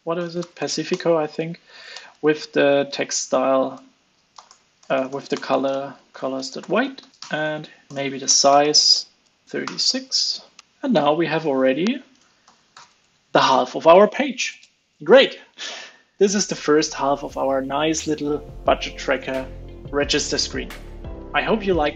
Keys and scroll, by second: 2.1 ctrl+space, 2.9 super+v, 3.7 super+z, 7.1 super+s, 7.1 alt+super+l, 7.4 super+s, 9.8 super+s, 10.6 super+s, 10.6 alt+super+l, 11.9 super+Right, 12.7 alt+super+l, 12.8 super+s.